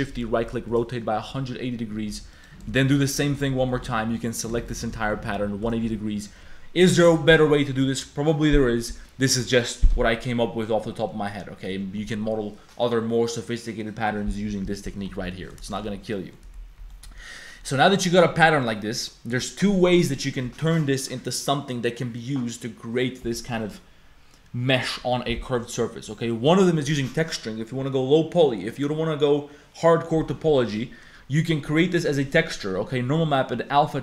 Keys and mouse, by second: 2.1-5.9 typing, 2.3 click, 16.1 click, 16.1 a, 16.8 a, 16.9 click, 17.0 a, 17.4 click, 17.8 click, 18.7 click, 24.4 click, 26.1 click, 33.2 click, 33.9 click.